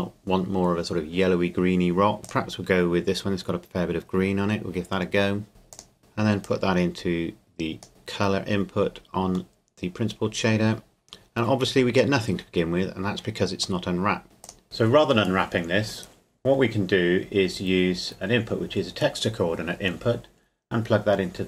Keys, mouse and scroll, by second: 2.2 click, 5.7 click, 6.4 click, 8.3-8.6 scroll up 1, 9.6 middle click, 11.9-13.8 scroll down 1, 13.8 middle click, 14.4 click, 14.9-17.1 drag.